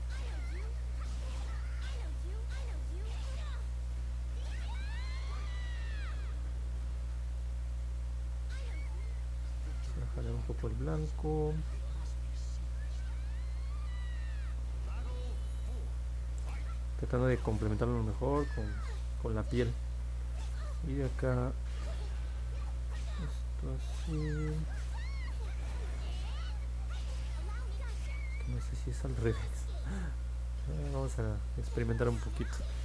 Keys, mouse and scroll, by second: 0.5 click, 1.1 click, 1.4 click, 1.8 click, 2.1 click, 2.4 click, 2.9 click, 3.2 click, 3.5 click, 3.8 click, 4.1 click, 4.5 click, 4.9 click, 5.3 click, 5.5 click, 5.8 click, 6.1 click, 6.4 click, 6.7 click, 6.9 click, 7.1 click, 7.4 click, 7.7 click, 8.0 click, 8.3 click, 8.6 click, 9.0 click, 9.3 click, 9.6 click, 9.9 click, 10.2 click, 10.6 click, 10.9 click, 11.2 click, 11.5 click, 11.8 click, 12.2 click, 12.6 click, 12.9 click, 13.2 click, 13.6 click, 13.9 click, 14.3 click, 14.9 click, 15.5 click, 15.8 click, 16.0 click, 16.4 click, 16.7 click, 17.0 click, 17.4 click, 17.7 click, 18.1 click, 20.3 click, 21.4 click, 22.0 click, 22.7 click, 23.1 click, 23.4 click, 24.0 click, 24.3 click, 24.7 click, 25.0 click, 25.3 click, 25.7 click, 26.0 click, 26.3 click, 26.7 click, 27.0 click, 27.4 click, 28.6 click, 29.0 click, 29.3 click, 29.7 click, 29.9 click, 30.2 click, 30.5 click, 30.8 click, 31.0 click, 31.3 click, 31.6 click, 31.8 click, 32.1 click, 32.3 click, 32.6 click.